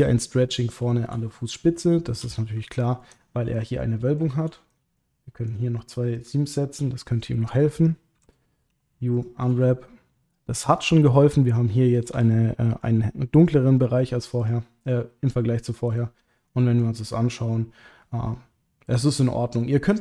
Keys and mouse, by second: 0.4 middle click, 1.8 shift+middle click, 2.7 ctrl+middle click, 3.6 click, 3.8 middle click, 4.7 shift+click, 4.9 middle click, 6.2 shift+click, 8.1 a, 8.7 u, 9.7 shift+middle click, 10.8 click, 12.1 a, 15.9 click, 16.5 middle click, 17.0 click, 17.3-19.6 middle drag.